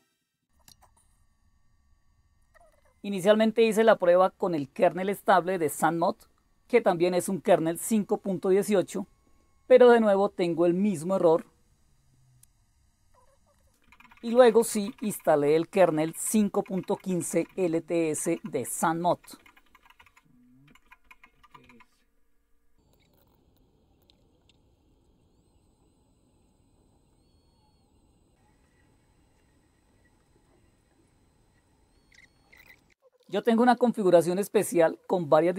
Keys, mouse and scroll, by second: 0.5 Up, 0.7 Return, 13.6-23.9 typing, 24.0 Return, 32.5-34.8 typing, 34.6 right click, 35.5 super+x.